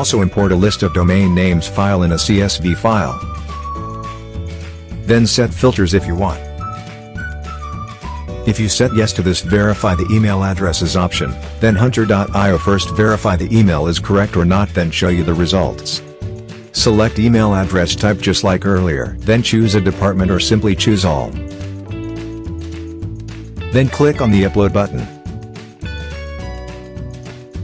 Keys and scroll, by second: 0.0-0.3 typing, 0.3 Return, 1.4-4.2 typing.